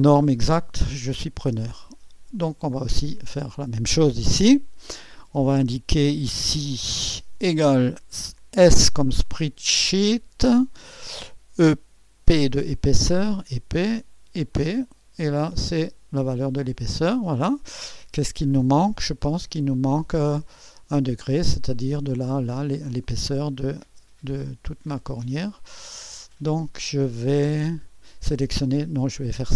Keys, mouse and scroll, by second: 0.0-1.1 drag, 1.1 right click, 1.7 click, 2.4 click, 4.0-5.0 drag, 7.4 =, 8.6 s, 9.8-10.9 drag, 10.6-12.2 typing, 13.2 click, 14.5-17.2 drag, 18.8-20.7 drag, 22.9-24.0 drag, 25.1-27.9 drag, 28.6 click.